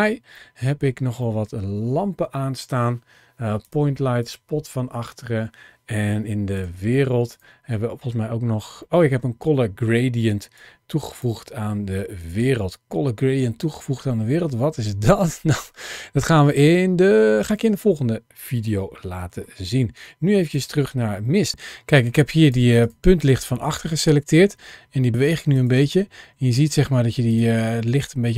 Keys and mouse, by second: 0.3 middle click, 1.1 middle click, 4.1 click, 6.4-7.2 drag, 8.7 middle click, 10.4 click, 12.1 click, 18.6 middle click, 23.0 click, 23.6 g, 25.4 click, 26.2 g, 27.1 click, 28.0 g.